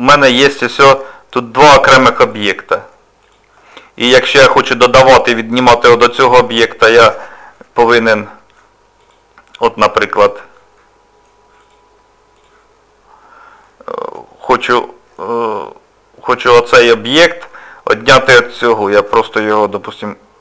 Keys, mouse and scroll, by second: 2.2 click, 3.2 click, 8.1 middle click, 9.0 click, 10.8 middle click, 11.6 click, 12.4 click, 13.6 middle click, 16.4 click.